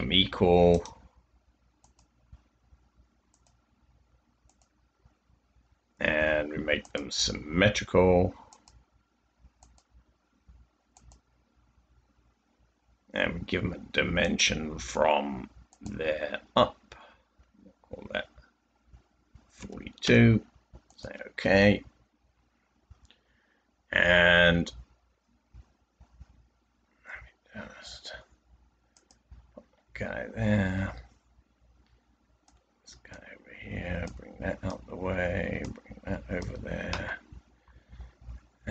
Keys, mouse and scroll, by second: 19.5-20.0 typing, 22.0-22.7 typing, 29.5-30.3 typing, 34.0 click, 34.2-35.1 typing, 37.6-38.3 typing.